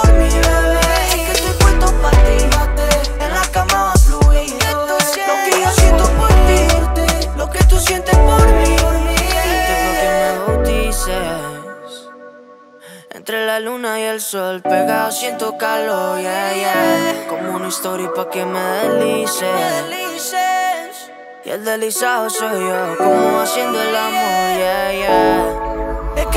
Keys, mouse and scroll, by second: 1.0-1.7 middle drag, 2.3 click, 6.0-6.7 middle drag, 7.4 click, 8.3 Return, 8.8-10.3 typing, 11.6-13.2 drag, 17.4-17.8 scroll up 1, 19.5 click, 20.6-26.3 alt+drag.